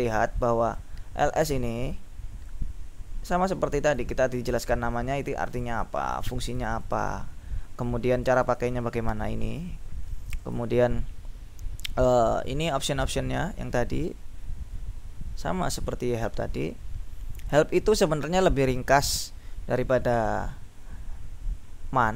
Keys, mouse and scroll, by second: 0.3-1.4 drag, 2.6-4.5 drag, 5.5-7.6 drag, 8.2-9.3 drag, 10.5 click, 12.4-12.8 scroll down 2, 12.8 scroll up 2, 13.0-17.5 scroll down 6, 17.9-19.2 scroll down 2.